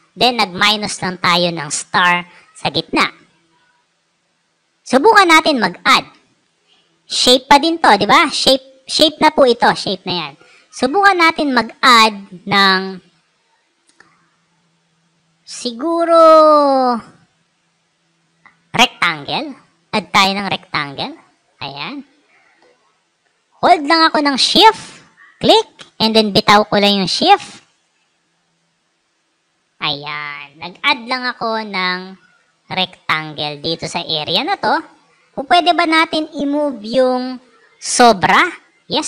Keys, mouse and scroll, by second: 6.0 click, 6.3 right click, 10.2 click, 10.7 right click, 21.1 click, 24.9-29.7 shift+drag, 31.2 click, 31.8 click, 34.4 alt+scroll up 2, 38.5-38.9 alt+scroll up 3.